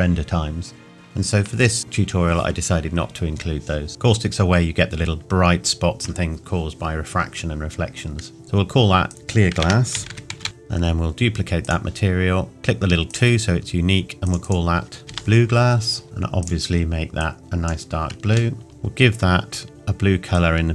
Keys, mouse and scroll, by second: 3.9-5.6 scroll up 2, 5.6 scroll up 1, 5.9-6.3 scroll down 1, 9.1 click, 11.6 click, 15.0 typing, 16.4 click, 18.6 shift+middle click, 18.7-19.7 scroll down 1, 20.3 click.